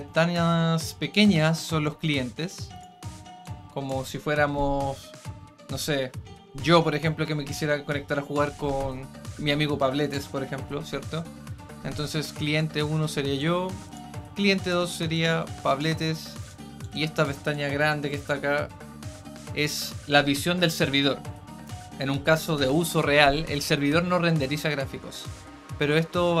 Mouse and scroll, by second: 0.1-1.1 drag, 1.8 click, 3.4 click, 12.5 click, 13.3 click, 14.5 click, 15.1 click, 16.4 click, 16.8 click, 17.4-19.6 drag.